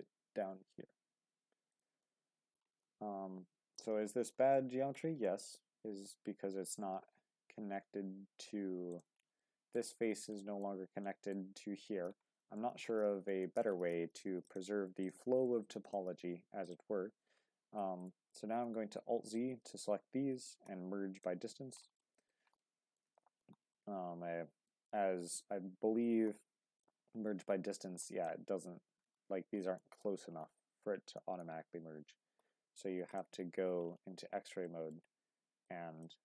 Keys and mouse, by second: 0.1 z, 1.7 click, 2.0 middle click, 2.8 middle click, 4.1 shift+middle click, 4.5 middle click, 5.2 shift+middle click, 6.0 z, 8.9 shift+click, 9.4 middle click, 10.3 middle click, 11.1 middle click, 12.6 shift+middle click, 13.4 shift+middle click, 14.4 click, 16.6 shift+click, 17.8 z, 18.7 alt+z, 19.4-20.6 drag, 20.6 m, 21.6 Tab, 22.0 shift+middle drag, 22.6-23.0 middle drag, 23.2 shift+middle drag, 23.8-24.7 middle drag, 25.0 Tab, 25.4 a, 26.2 m, 28.0 click, 29.8 shift+middle click, 31.2 shift+middle click, 32.4 m, 34.6 shift+middle click, 35.7-36.2 drag.